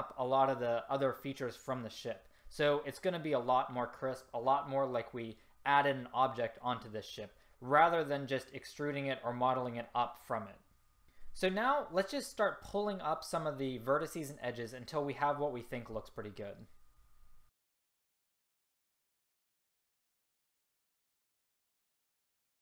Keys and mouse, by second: 17.5 click, 17.6 right click, 18.9 click, 19.2 ctrl+z, 19.5 click, 19.5 right click, 19.8 ctrl+z, 20.5 middle click.